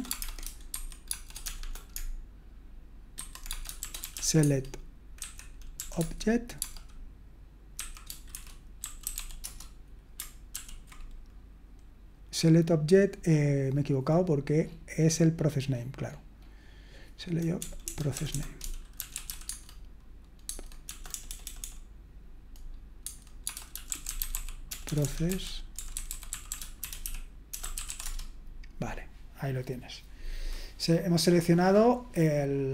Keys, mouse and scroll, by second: 0.0-6.6 typing, 7.7-9.6 typing, 10.5 ctrl+p, 17.6-19.7 typing, 20.4 Tab, 20.8-21.6 typing, 23.0 shift+Tab, 23.2-28.3 typing.